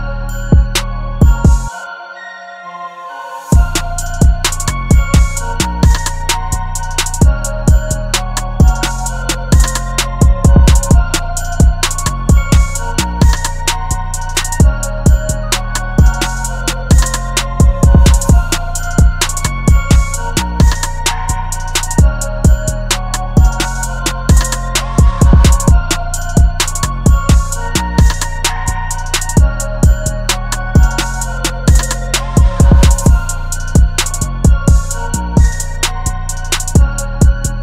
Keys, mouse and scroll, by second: 0.3 right click, 9.2 ctrl+t, 15.3 Return.